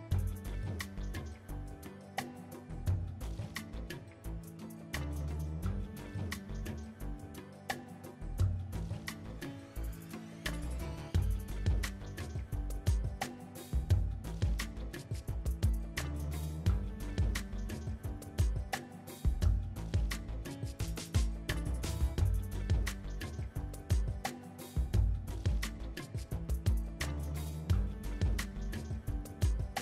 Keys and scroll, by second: 3.8 KP_Decimal, 11.9 KP_7, 13.0 Tab, 19.9 Tab, 22.3 Tab, 22.9 KP_7, 23.9 Tab, 25.1 Tab, 25.7 a, 26.7 shift+d.